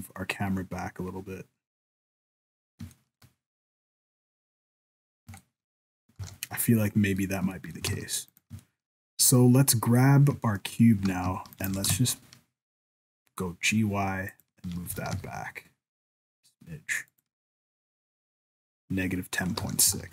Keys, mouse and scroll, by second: 0.2 scroll down 1, 0.7 scroll up 1, 2.6 scroll up 2, 3.0 shift+middle click, 3.4-4.5 scroll up 3, 4.5-5.3 scroll down 5, 5.4 shift+middle click, 6.0 scroll down 1, 6.2 ctrl+s, 6.9 middle click, 7.3 scroll down 1, 7.6 shift+middle click, 7.9 alt+a, 8.3 right click, 8.6 shift+middle click, 10.4 shift+middle click, 11.0 g, 11.7 g, 14.9 g, 19.6 ctrl+s, 20.0 alt+a.